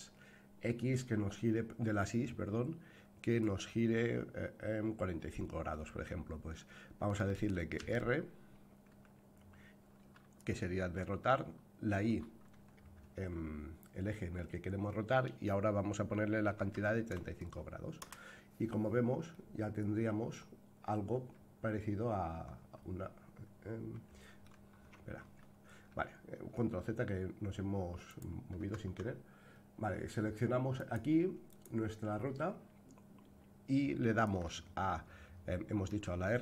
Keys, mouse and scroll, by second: 7.8 r, 19.3-24.4 middle drag, 25.2 ctrl+z, 28.0 click, 28.6 Tab, 30.7 click, 31.5 click, 35.9 r.